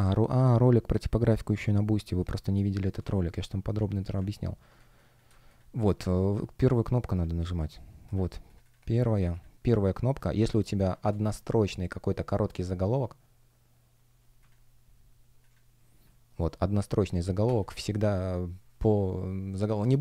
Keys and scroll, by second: 2.4 space, 4.7 space, 10.4 space.